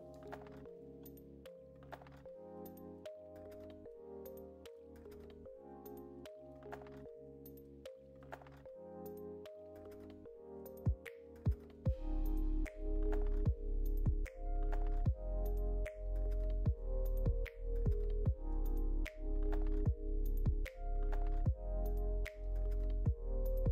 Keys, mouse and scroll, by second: 0.7 click, 0.9 middle click, 1.9 shift+middle click, 2.5 click, 2.9 click, 3.6 click, 4.2 click, 4.6 click, 4.9 middle click, 5.6 shift+click, 6.9 shift+click, 7.9 shift+click, 8.6 click, 10.0 shift+click, 11.6 click, 12.7 click, 13.3 middle click, 14.0 shift+middle click, 14.6 scroll down 2, 14.9 click, 15.6 click, 17.0 shift+click, 18.7 middle click, 20.6 shift+click, 21.4 middle click, 22.4 shift+middle click, 22.6-22.9 scroll down 1, 23.0 click, 23.4 middle click.